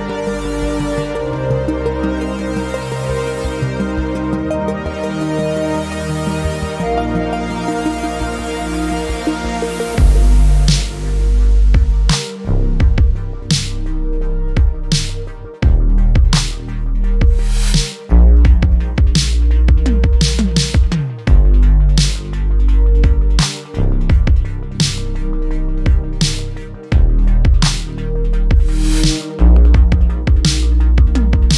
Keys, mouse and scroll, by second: 0.7 ctrl+r, 1.6 click, 2.8 shift+click, 3.8 s, 7.2 click, 7.7 click, 9.3 click, 9.6 click, 10.5 shift+click, 11.1 s, 12.2 click, 13.0 ctrl+r, 13.7 click, 14.1 shift+click, 14.8 s, 17.4 Tab, 17.9-20.2 drag, 20.2 Tab, 21.4-22.7 middle drag, 22.7 KP_7, 23.9-25.0 shift+middle drag, 25.0 click, 25.7 click, 27.7 click, 28.2 shift+click, 29.1 s.